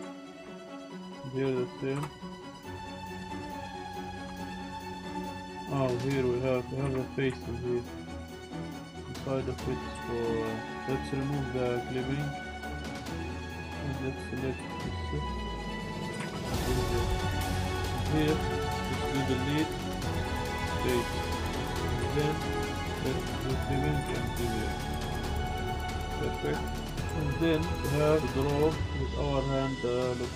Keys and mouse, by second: 0.3 middle click, 1.1 click, 2.4 middle click, 3.5 click, 4.6 middle click, 5.1 Delete, 5.1 Tab, 5.1-5.5 drag, 6.2 shift+click, 6.6 shift+click, 6.8 z, 7.4 shift+click, 7.8 click, 8.5 z, 8.8 shift+click, 9.9 3, 10.6 click, 10.8 `, 12.1 click, 13.2 1, 13.6 z, 13.8 click, 14.8 middle click, 16.1 g, 16.8 click, 17.7 middle click, 18.6 middle click, 18.9 Delete, 21.2 click, 21.4 click, 21.7 click, 22.0 z, 22.3 click, 22.5 z, 22.7 click, 23.6 click, 24.0 g, 24.1 z, 24.8 click, 25.0 Tab, 25.3 drag, 25.4-25.8 drag, 26.1 drag, 27.8 Tab, 28.0 click.